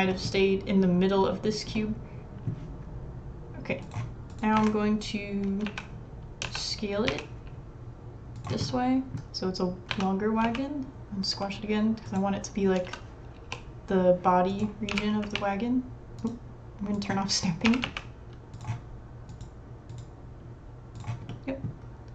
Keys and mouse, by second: 0.1 click, 1.7 middle drag, 4.6 Tab, 5.7 a, 6.4 s, 8.7 middle click, 8.8 click, 9.9 s, 12.8 s, 14.9 g, 15.2-18.6 drag, 17.7 g, 19.3 click, 19.9 click, 20.7-21.7 drag.